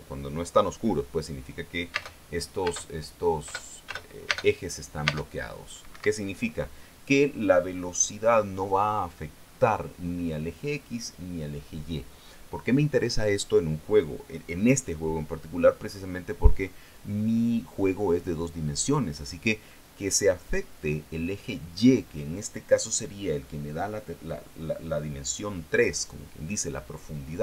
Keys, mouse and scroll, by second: 2.4 space, 3.2 space, 4.0 space, 5.6 space, 6.4 Escape.